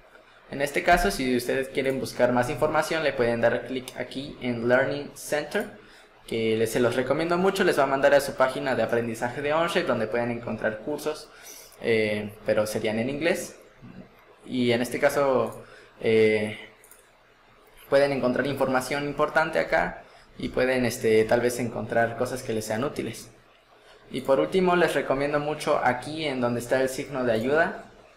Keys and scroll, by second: 0.9 Escape.